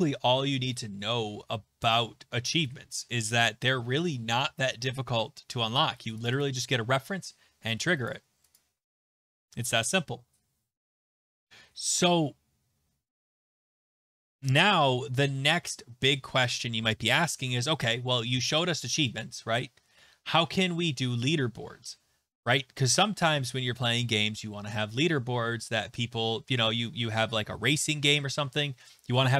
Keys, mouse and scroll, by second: 6.3 click, 6.4 click, 8.1 click, 8.5 click, 12.6-13.6 scroll, 13.6 scroll, 14.5-18.4 scroll, 18.5 click, 20.6 click.